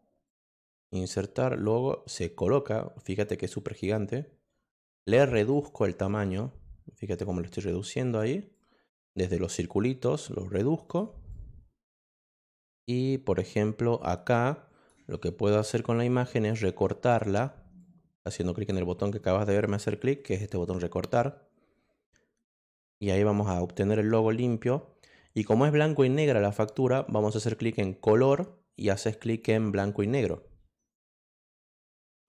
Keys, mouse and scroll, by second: 0.2 click, 1.5 click, 2.9 click, 4.7 click, 5.8 click, 7.2 click, 8.5 click, 9.8-10.9 drag, 11.3-14.8 drag, 16.5 click, 17.8 click, 22.6 click, 27.6 click, 31.4 click.